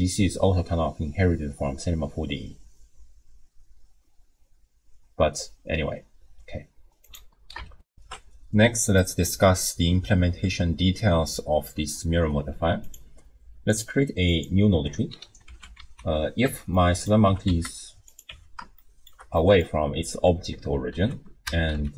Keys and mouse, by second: 7.9 ctrl+alt+shift+w, 8.1 ctrl+alt+shift+q, 13.7 click, 14.3 click, 15.5 alt+g, 15.8 alt+r, 16.4 Tab, 16.8 click, 17.3 g, 18.3 Tab, 18.9 shift+click, 19.5 click, 20.9 ctrl+a.